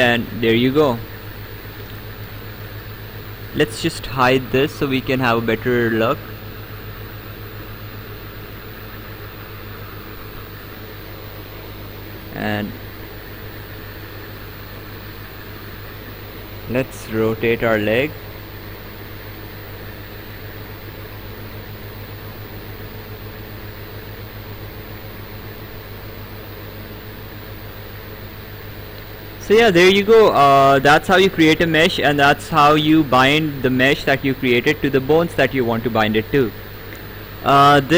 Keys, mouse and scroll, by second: 2.5 ctrl+z, 3.6 click, 5.1 click, 6.6 click, 11.7 click, 13.0 click, 14.6 right click, 17.1 click, 21.4 click, 25.3 click, 28.9 ctrl+z, 30.6 right click, 33.0 right click, 36.7 right click.